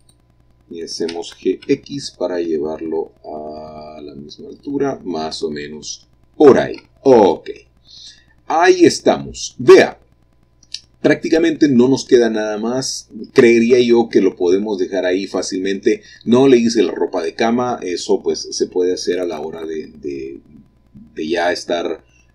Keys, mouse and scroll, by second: 0.2-1.3 drag, 1.3 g, 1.8 x, 4.8 click, 5.4 click, 6.1 middle click, 6.3-7.0 scroll down 1, 7.8 middle click, 8.5-11.0 scroll down 1, 16.1 middle click, 17.4 click, 19.6-22.3 middle drag.